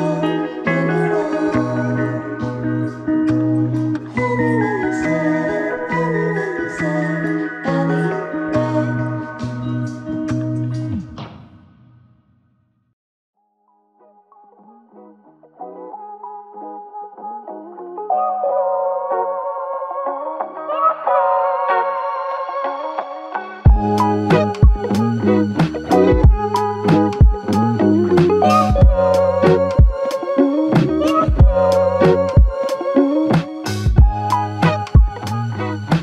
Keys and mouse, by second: 22.1 double click.